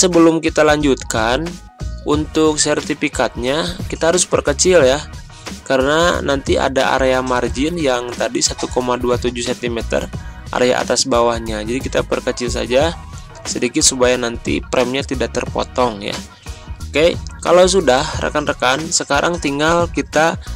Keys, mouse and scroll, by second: 0.0 ctrl+scroll down 1, 4.1-6.4 shift+drag, 11.9-13.5 shift+drag, 16.8 click.